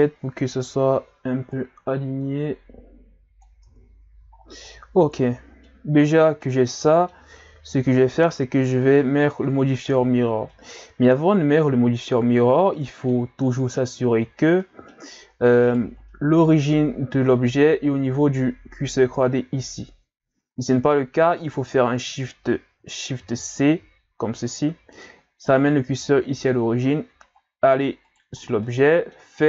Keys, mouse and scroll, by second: 0.5-1.3 scroll down 1, 1.5 click, 3.7 Tab, 4.1 a, 4.3-4.7 scroll down 6, 4.7-7.4 middle drag, 7.4-8.5 scroll up 4, 8.5-9.9 scroll down 8, 10.0-10.5 scroll down 2, 10.5-13.5 middle drag, 13.6 scroll up 1, 14.6-15.7 middle drag, 15.7 right click, 16.1-17.0 middle drag, 17.0-17.9 scroll up 2, 20.5-20.9 scroll down 1, 23.2 shift+c, 26.9-28.1 scroll up 4, 28.1 right click, 28.4 scroll down 2, 28.6-29.4 middle drag.